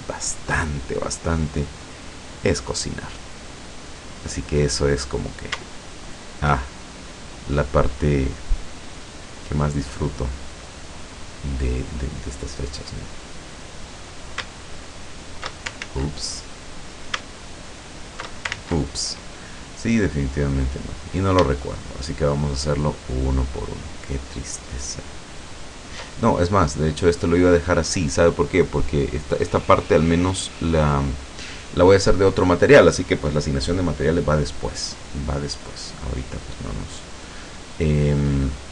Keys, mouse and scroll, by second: 1.2-4.0 drag, 5.0 right click, 5.7 alt+shift+right click, 6.9-9.6 alt+shift+drag, 11.4 click, 12.0-12.4 scroll up 1, 13.2 right click, 13.6 right click, 14.0 right click, 14.6 alt+shift+right click, 15.9 ctrl+alt+shift+z, 16.9 right click, 17.4 alt+shift+right click, 17.8 alt+shift+right click, 18.6 ctrl+alt+shift+z, 20.6 right click, 21.0 right click, 21.8 shift+right click, 22.4 shift+right click, 23.3 shift+right click, 25.5 shift+right click, 37.2 right click, 37.8-38.7 scroll down 2.